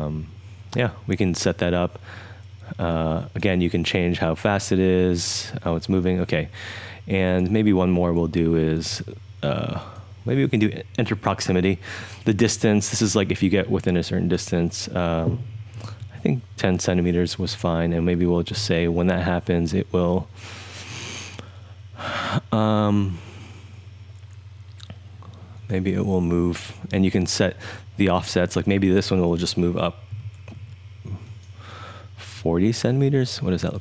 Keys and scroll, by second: 16.0 super+z, 29.9-30.6 typing.